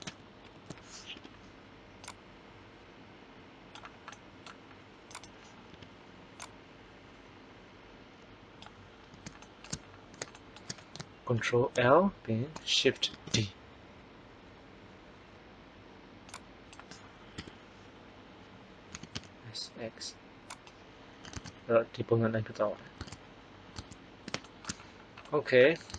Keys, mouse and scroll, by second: 0.4 ctrl+l, 1.1 KP_3, 5.0 right click, 5.6 KP_3, 11.2 ctrl+l, 13.1 shift+d, 17.3 KP_1, 18.9 s, 23.7 alt+Tab.